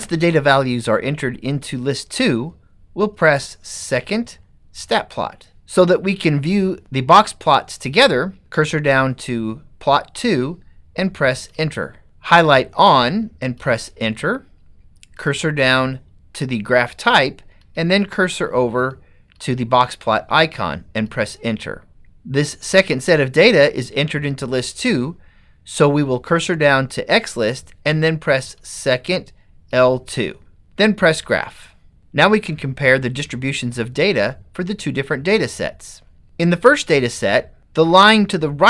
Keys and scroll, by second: 8.4 Down, 11.9 Return, 13.8 Return, 15.3 Down, 17.7 Right, 18.4 Right, 19.4 Right, 21.2 Return, 24.0 Down, 29.7 2.